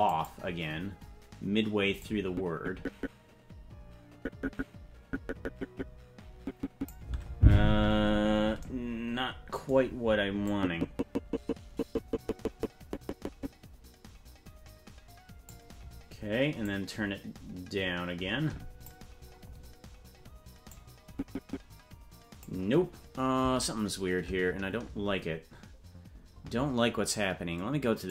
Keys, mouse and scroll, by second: 0.6 click, 2.4-7.2 drag, 7.7-9.0 scroll up 17, 10.6-15.7 drag, 17.0-19.5 drag, 21.2-22.7 drag.